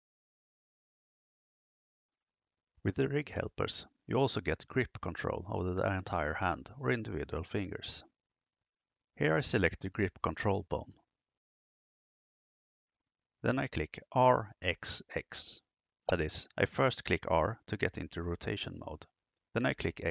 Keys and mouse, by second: 10.1 right click, 14.0 r, 14.8 x, 15.3 x.